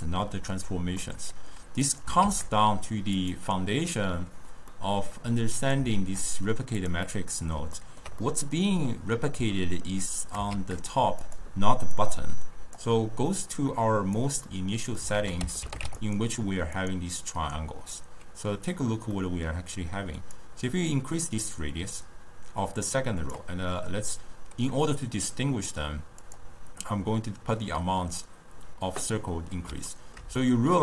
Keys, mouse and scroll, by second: 1.1-2.1 middle drag, 2.1 click, 2.8 shift+d, 4.8-5.7 middle drag, 5.7 click, 6.4 shift+d, 7.2-10.3 middle drag, 10.3 click, 11.0 shift+d, 12.0-13.5 drag, 14.7-15.3 middle drag, 15.3 ctrl+a, 17.5 drag, 19.2-20.5 middle drag, 20.5-23.5 drag, 26.3-29.3 drag, 30.0-30.8 ctrl+middle drag.